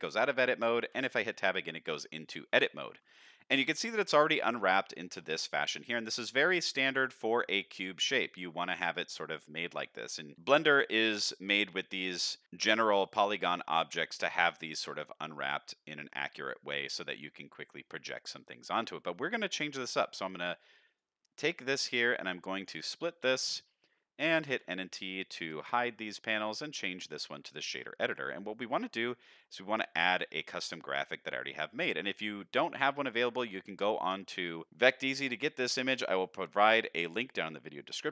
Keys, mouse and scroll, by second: 0.9 Tab, 10.3 middle click, 12.4 middle click, 18.0 middle click, 18.9 middle click, 20.9-22.6 drag, 23.2 t, 25.5 n, 26.1-27.2 drag, 27.9 middle click, 28.4 middle click, 29.2 middle click, 30.2 middle click, 31.2 middle click, 31.8 middle click, 33.2 click, 34.2 middle click, 34.7 middle click, 35.5 middle click, 36.0 middle click, 37.5 middle drag.